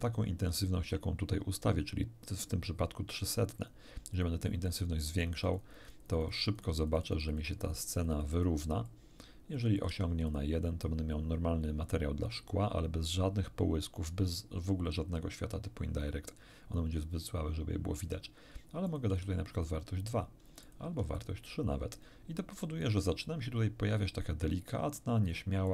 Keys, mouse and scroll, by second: 3.6 click, 4.1 click, 4.6-8.6 drag, 8.8-10.0 drag, 9.8 1, 10.2 click, 18.8 click, 19.1 2, 19.6 click, 20.6 click, 20.8 3, 21.2 click, 25.6 click.